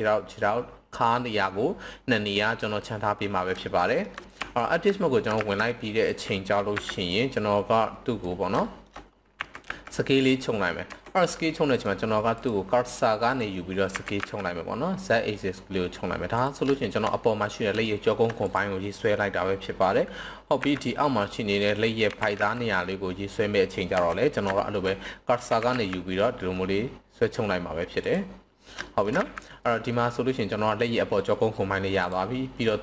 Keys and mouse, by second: 3.6 shift+middle drag, 4.3 KP_1, 4.3 Tab, 5.0 shift+middle click, 5.3 z, 6.5 b, 8.6 shift+middle drag, 9.3 s, 9.6 z, 10.8 Escape, 12.3-13.4 drag, 13.9 s, 14.1 z, 16.3 click, 16.7 shift+middle drag, 17.8 shift+middle drag, 18.4 click, 20.6 b, 22.0 s, 22.3 z, 23.9 Escape, 24.5 shift+middle click, 25.5 s, 25.7 z, 28.0 drag, 28.9 shift+middle click, 29.2 z, 29.9-30.5 middle drag.